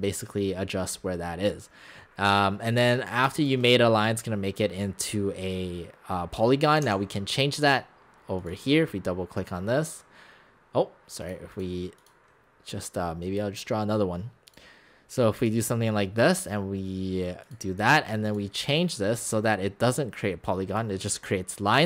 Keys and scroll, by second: 6.8 x.